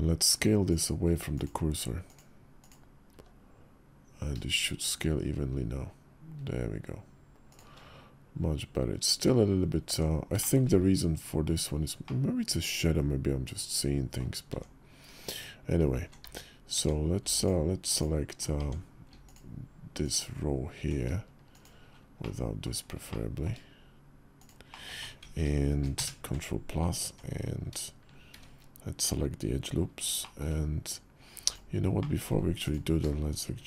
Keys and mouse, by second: 0.4-1.2 drag, 2.0 click, 2.9 s, 9.7 Tab, 10.1 shift+drag, 11.8-13.9 drag, 13.9 middle drag, 14.2 Tab, 17.7 alt+click, 18.3 Tab, 19.0 alt+click, 21.3 shift+click, 22.0 middle click, 22.9 click, 23.2 middle click, 24.2 shift+click, 24.5 shift+click, 25.7 ctrl+KP_Add, 26.8 Tab, 28.1 shift+`, 31.8 middle click, 33.4 ctrl+b.